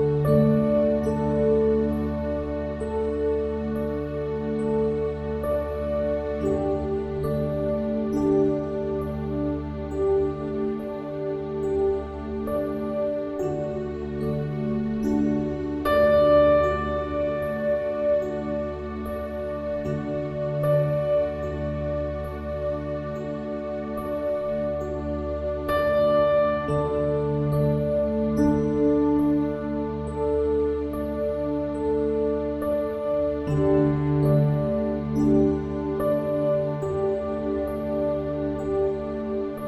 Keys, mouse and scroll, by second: 0.5 ctrl+e, 1.5 click, 2.4 click, 3.2 Tab, 3.8 Tab, 4.4 KP_1, 5.4 middle click, 6.7 middle click, 8.4 ctrl+r, 10.6 ctrl+r, 11.7 ctrl+r, 13.0 ctrl+r, 13.5 s, 14.5 ctrl+b, 15.7 s, 16.9 ctrl+r, 18.2 click, 18.8 ctrl+r, 19.5 ctrl+r, 20.2 s, 21.4 ctrl+b, 23.0 ctrl+r, 24.0 ctrl+r, 25.3 middle click, 26.0 click, 27.0 Tab, 27.4 Tab, 29.1 middle click, 29.5 click, 30.0 x, 30.6-31.7 drag, 31.3 e, 31.8 click, 32.6 click, 33.5 w, 33.9 click, 34.8 x, 35.7-36.7 drag, 36.6 w, 37.2 click, 37.9-39.6 typing.